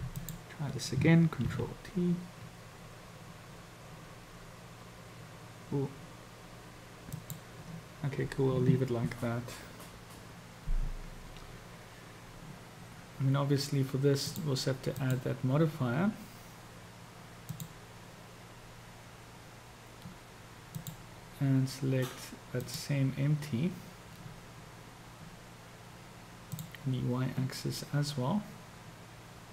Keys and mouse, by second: 0.3 click, 1.5 ctrl+t, 14.3 drag, 15.1-19.6 drag, 20.8-24.6 drag.